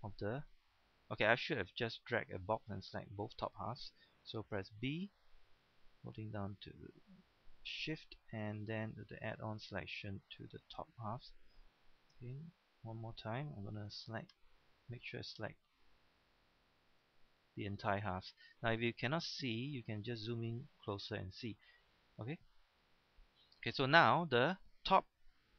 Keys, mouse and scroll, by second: 0.2 shift+middle click, 0.7 scroll down 1, 2.7 shift+middle click, 4.6 b, 7.7-10.7 shift+drag, 12.7 shift+b, 14.6-17.0 shift+drag, 17.7-18.1 scroll up 1, 18.4 shift+scroll up 1, 19.5 shift+middle click, 20.7-21.7 scroll down 2, 21.7-22.8 scroll down 1.